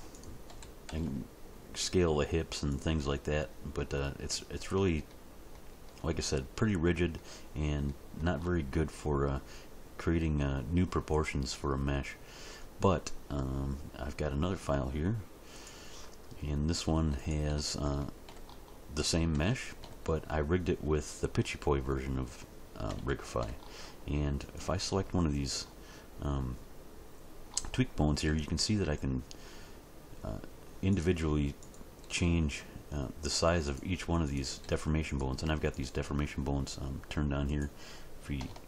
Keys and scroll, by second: 0.5 s, 0.9 x, 28.2 s, 32.1 s, 34.6 s.